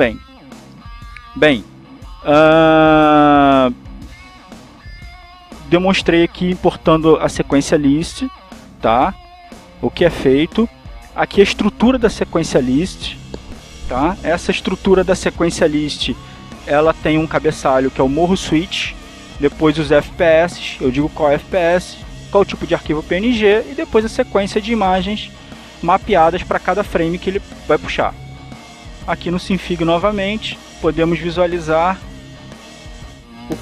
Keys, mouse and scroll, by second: 0.7 click, 13.7 click, 14.5 click, 15.7-17.7 drag, 22.0-23.8 drag, 28.7 click, 29.8 click, 30.8 click.